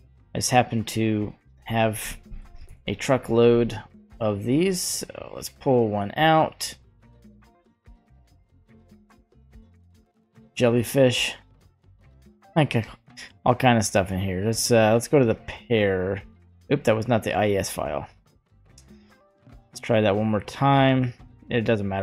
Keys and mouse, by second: 16.7 click, 17.9 click, 19.3 click.